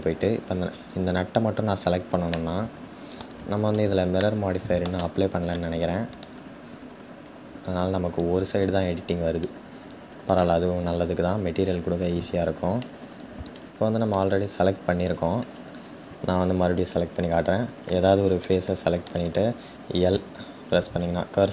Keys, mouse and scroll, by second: 1.9-5.4 middle drag, 5.4-6.1 scroll up 1, 6.1-10.6 drag, 10.6-11.6 scroll up 3, 11.6-12.5 scroll up 1, 12.5-13.9 drag.